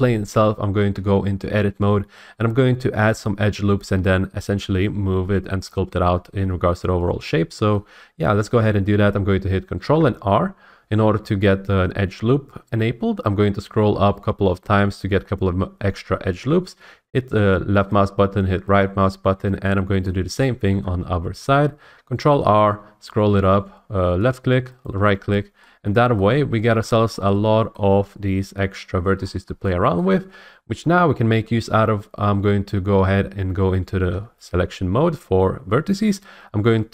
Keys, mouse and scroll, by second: 0.9 Tab, 7.7 middle click, 9.8 ctrl+r, 13.3 middle click, 13.5 middle click, 13.6 middle click, 13.9 middle click, 14.0 middle click, 14.6-16.7 scroll, 17.9 click, 18.8 middle click, 20.0 middle click, 20.7 ctrl+r, 21.3 middle click, 21.6 middle click, 21.8 middle click, 21.9 middle click, 22.1-22.8 scroll, 24.3 click, 24.8 right click, 26.2 scroll, 26.8-27.3 scroll, 27.1 shift+middle click, 27.7 shift+middle click, 27.9 middle click, 27.9 scroll, 28.6-29.1 scroll up 3, 29.1 middle click, 29.2 scroll, 29.4 middle click, 30.0 shift+middle click, 34.1 1.